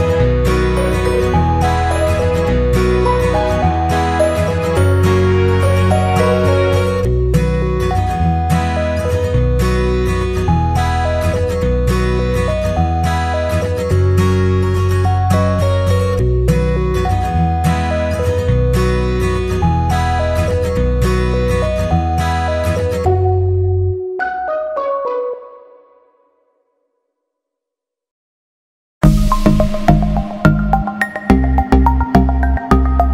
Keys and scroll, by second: 1.1 ctrl+z, 2.5 ctrl+-, 5.0 Delete.